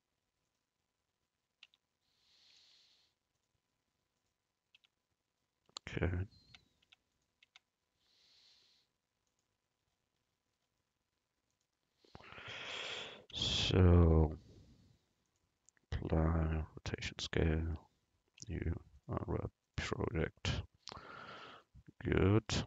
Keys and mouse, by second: 1.7 Tab, 2.8 u, 4.9 Tab, 6.5 Tab, 7.0 Tab, 7.2-11.0 drag, 7.5 Tab, 13.5 Tab, 17.4 Tab, 18.5 u, 20.2 Tab.